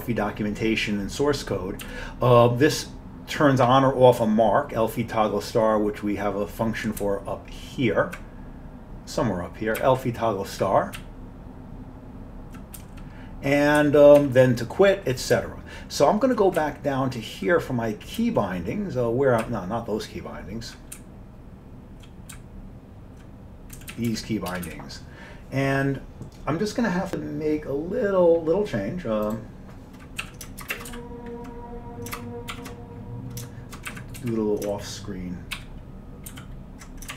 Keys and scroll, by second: 1.8 Down, 7.0-8.2 Up, 9.8-11.0 Up, 11.0 Down, 11.5-12.6 Down, 13.8 Up, 14.2 Down, 15.4 Down, 15.9 Down, 16.2 Down, 16.3 Down, 16.6 Down, 17.1 Down, 17.1 Down, 17.4 Down, 17.5 Down, 18.2 Down, 18.4 Down, 19.4 Up, 19.9 Up, 20.4 Up, 20.6 Up, 21.2 Up, 21.5-22.0 Up, 22.3-23.2 Up, 23.8 Down, 23.9 Down, 24.1 Down, 24.5 Return, 24.7 Up, 30.3 Down, 30.8 ctrl+shift+space, 31.0 ctrl+n, 31.2 ctrl+b, 32.6 ctrl+_, 34.0 Up, 34.3 Right, 35.7 ctrl+k, 36.4 ctrl+y.